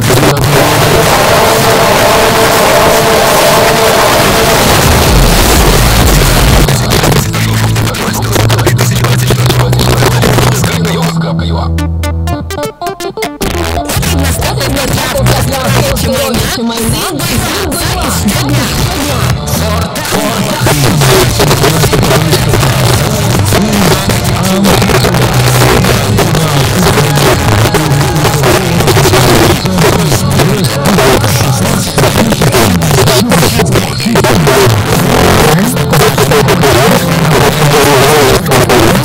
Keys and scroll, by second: 6.6 Page_Down.